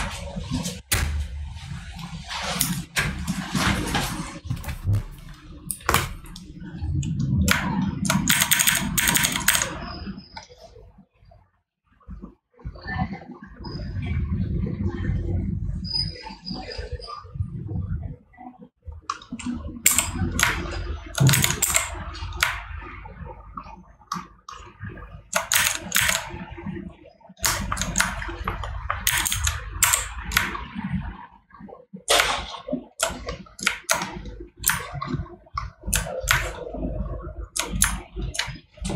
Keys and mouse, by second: 27.6 right click.